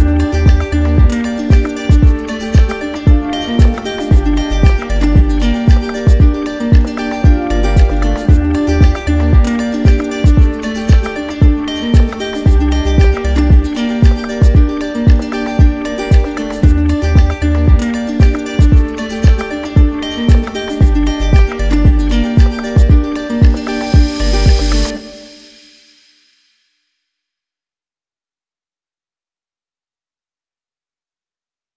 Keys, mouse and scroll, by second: 0.4 right click, 0.4 ctrl+click, 2.8 click, 5.8 click, 6.9 click, 8.7 click, 9.2 shift+click, 10.0 click, 10.9 click, 12.0 middle click, 13.0 middle click, 17.2 right click, 18.1 right click, 19.5 right click, 22.6 right click.